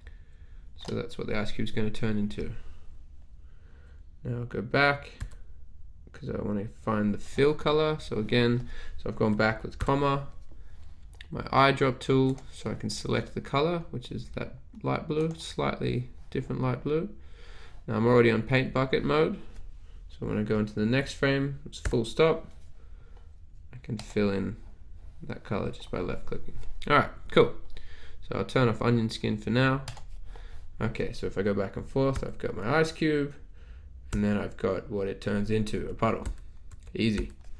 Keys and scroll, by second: 5.3 ,, 9.4 ,, 22.0 ., 32.3 ,, 34.2 ., 35.8 ,, 36.3 ., 36.7 ,, 37.1 ..